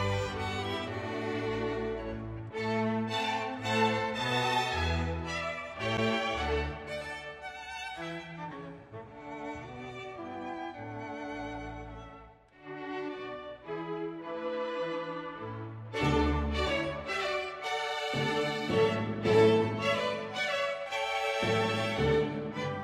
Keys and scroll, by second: 0.0 Page_Up, 0.1 Page_Down, 0.3 Page_Down, 0.5 Page_Down, 0.7 Page_Down, 0.9 Page_Down, 1.2 Page_Up, 1.4 Page_Down, 2.0 Page_Down, 2.2 Page_Up, 2.4 Page_Down, 3.0 Page_Up, 3.0 Page_Down, 3.3 Page_Down, 3.6 Page_Up, 3.7 Page_Down, 3.9 Page_Down, 4.4 Page_Down, 4.6 Page_Down, 4.8 Page_Down, 5.5 Page_Down, 6.0 Page_Down, 6.8 Page_Down, 7.1 ctrl+z, 7.7 Page_Up, 7.7 Page_Down, 8.1 Page_Up, 8.2 Page_Down, 8.4 Page_Down, 8.7 Page_Down, 8.9 Page_Down, 9.4 Page_Down, 9.9 Page_Down, 10.2 Page_Down, 11.0 ctrl+s, 11.5-14.8 typing, 16.7 space.